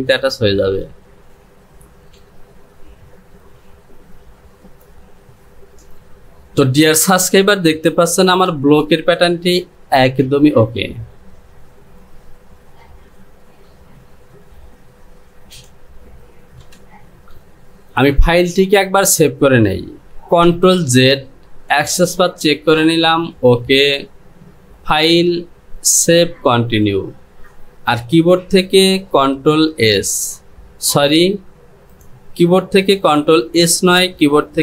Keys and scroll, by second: 2.3 Delete, 8.5 Return, 16.8 Home, 29.8 ctrl+s.